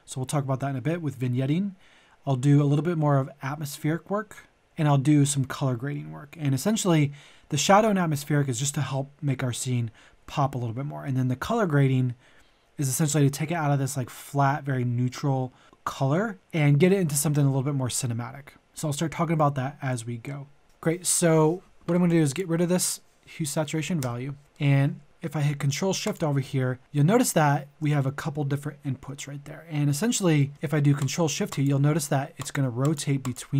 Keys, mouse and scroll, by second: 24.0 Delete, 24.5 middle click, 26.0 shift+click, 29.9 scroll up 1, 30.4 middle click, 31.0 ctrl+shift+click.